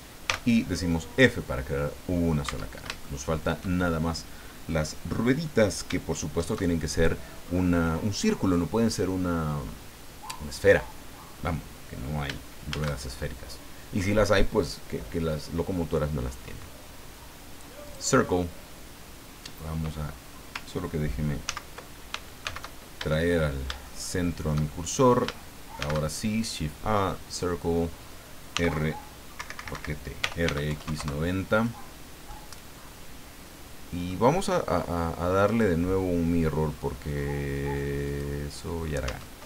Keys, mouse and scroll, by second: 0.3 f, 0.8-1.1 scroll down 2, 1.2-2.4 middle drag, 2.5 Tab, 3.0 shift+middle click, 12.7 shift+a, 17.9 click, 21.4 ctrl+z, 22.4 shift+c, 23.3-24.2 shift+scroll up 6, 23.8 shift+click, 25.8 shift+a, 27.3 click, 28.5 t, 29.3 Escape, 30.0-30.9 typing, 31.0 KP_Enter, 32.3-34.2 middle drag, 35.4 click, 38.0 click, 39.0 Tab.